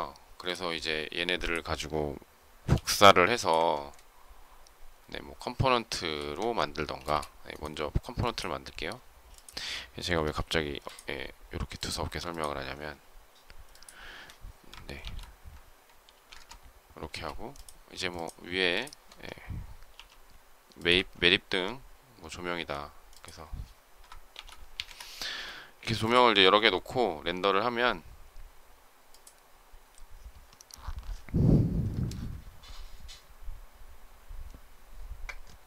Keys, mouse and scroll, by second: 2.6 m, 6.3 Escape, 6.9 space, 10.1 m, 12.2 ctrl+click, 13.5 shift+click, 14.9 shift+8, 16.0 3, 16.2 Return, 16.9 space, 18.0 shift+click, 18.6 shift+click, 19.8 m, 24.2 shift+8, 24.7 Return.